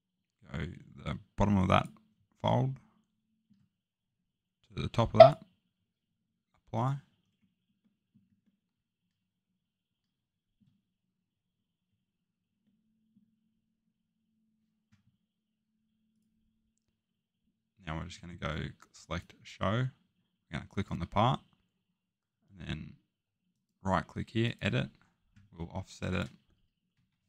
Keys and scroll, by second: 26.9 1.